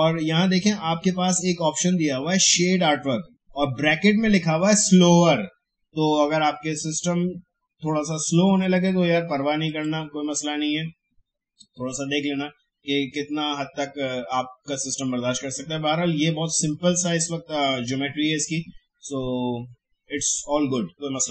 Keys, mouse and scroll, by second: 9.6 click.